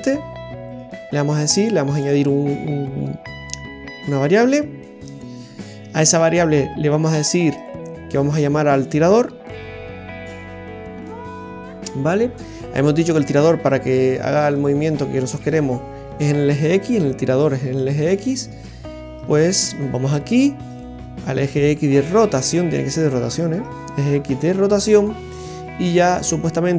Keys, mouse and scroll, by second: 0.6 right click, 3.9 right click, 18.3 right click, 26.3 click.